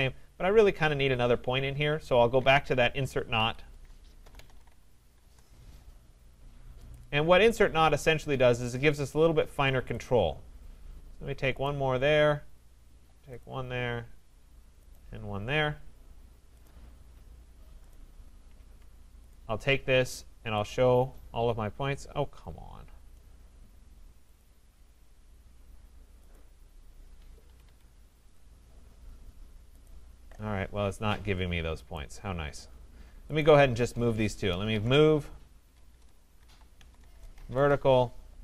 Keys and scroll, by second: 3.3 Escape, 5.2 Return, 18.5 Escape, 27.3 Escape, 35.7 BackSpace, 37.0 Return.